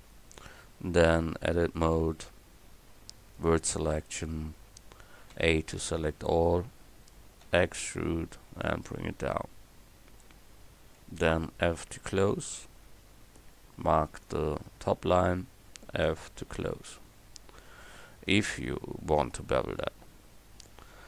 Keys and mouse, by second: 1.0 Tab, 5.3 a, 5.8 a, 7.5 e, 8.6 click, 12.0 f, 16.1 f.